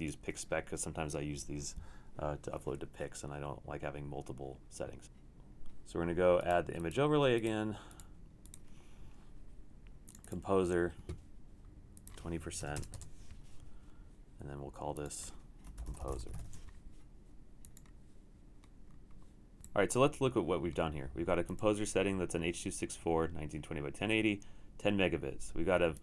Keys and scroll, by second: 12.4-13.3 typing, 15.5-16.8 typing, 19.6 typing.